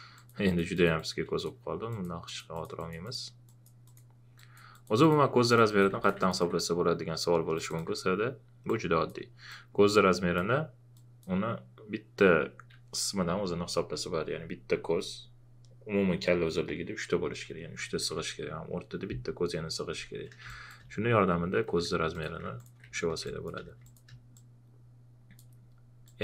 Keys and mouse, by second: 1.4 ctrl+click, 5.5 alt+click, 5.9 ctrl+a, 6.0 ctrl+click, 7.5-10.9 alt+drag, 20.4 space, 20.5 click, 23.2 space, 23.2 click, 23.7 space, 23.8-26.2 drag.